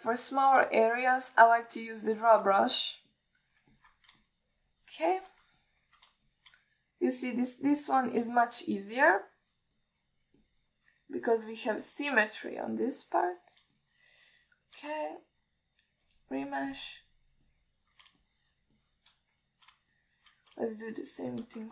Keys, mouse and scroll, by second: 0.3 alt+shift+middle drag, 1.1-1.8 shift+drag, 2.4-2.8 middle drag, 3.1-3.5 middle drag, 3.8 ctrl+alt+middle click, 4.4 alt+middle click, 5.0 ctrl+middle click, 5.5-6.5 shift+drag, 6.9 alt+middle click, 7.5 alt+shift+middle click, 8.2 middle click, 9.0 click, 9.6-10.9 shift+drag, 11.0 shift+click, 11.7 shift+click, 12.4 click, 13.0 click, 13.8 alt+middle click, 14.3 click, 15.0 shift+click, 16.3 alt+middle click, 17.3-18.2 drag, 18.7 middle click, 19.5 shift+click, 20.0 shift+click, 20.8 alt+middle click, 21.2 alt+shift+middle click.